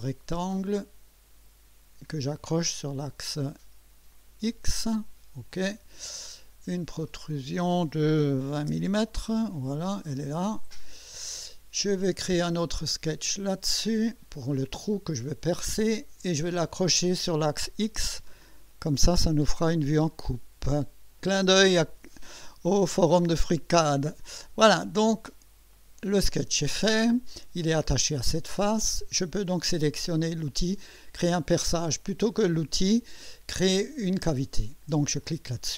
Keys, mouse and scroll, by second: 0.5 click, 2.3 click, 4.1 click, 5.5 click, 7.1 click, 8.5 KP_2, 8.7 KP_0, 9.1 Return, 10.0-11.5 drag, 10.8 right click, 12.4 click, 13.8 click, 16.4 click, 18.7 click, 24.0 click, 25.7 click, 35.2 click.